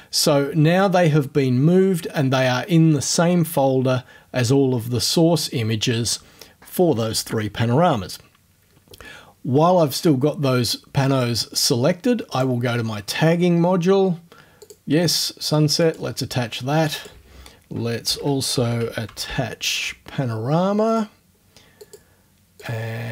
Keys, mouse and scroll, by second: 12.4 click, 14.6 click, 15.1 right click, 15.8 click, 17.0 click, 18.1 shift+Home, 18.3-19.8 typing, 20.9 right click, 21.8 click, 22.6 middle click, 22.6 click.